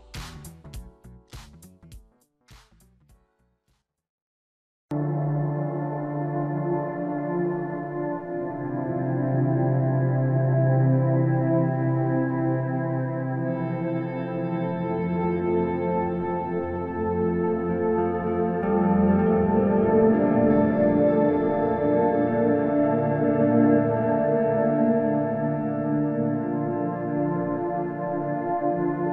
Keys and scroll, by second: 4.1 space, 9.0 space, 12.2 space, 19.3 space, 25.6 space, 28.6 space.